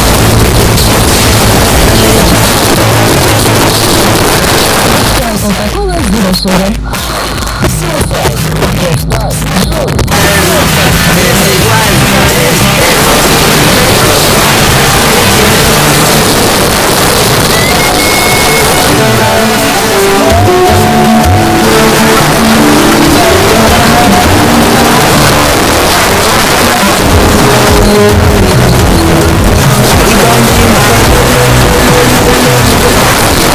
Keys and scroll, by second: 2.5 Page_Down, 16.2 Page_Down, 25.0 Page_Down, 33.1 Page_Down.